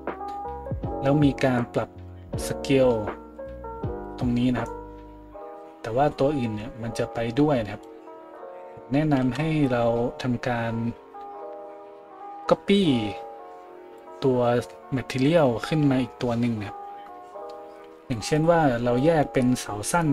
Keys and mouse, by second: 9.3 ctrl+z.